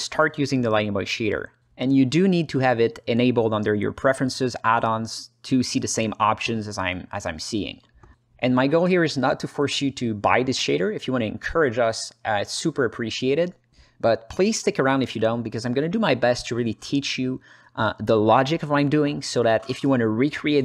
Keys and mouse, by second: 2.7-3.6 drag, 17.0 click, 18.8 click, 19.2 click, 20.2 shift+a.